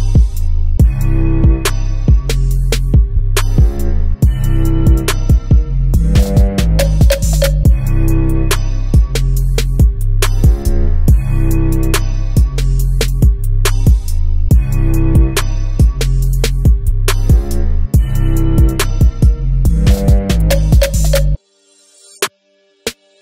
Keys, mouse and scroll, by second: 1.9-2.7 scroll up 1, 2.7 scroll down 1, 3.4 scroll down 1, 4.3 scroll up 1, 4.5 KP_7, 5.4 shift+right click, 7.2 shift+a, 7.7 s, 8.7 click, 8.9 g, 9.8 click, 10.1 shift+z, 10.6 g, 11.8 click, 13.1 s, 13.6 click, 13.9 g, 14.5 click, 15.7 KP_1, 17.3 s, 18.2 click, 18.7 g, 19.9 click, 20.1 s, 21.9 click, 22.1 g, 23.1 click.